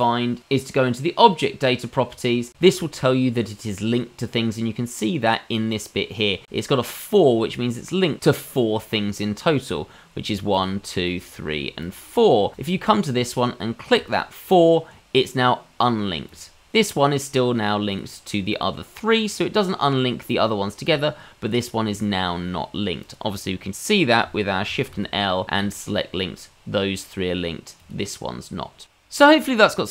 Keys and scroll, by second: 24.9 shift+l.